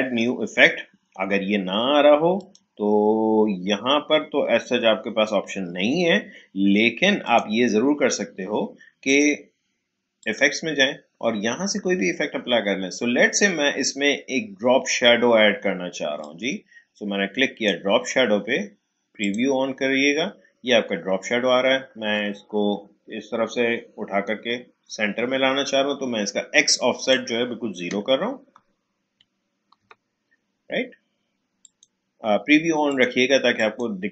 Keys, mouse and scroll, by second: 4.6 click, 7.2 click, 16.2-19.2 drag, 26.7-29.6 drag, 29.8 0, 31.6-34.1 drag.